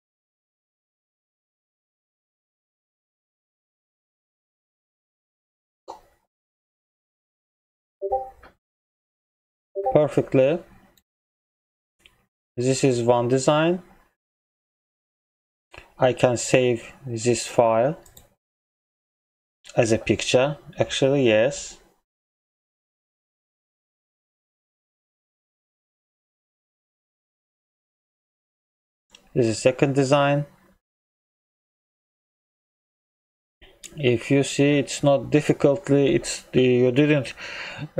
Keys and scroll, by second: 11.2 ctrl+m.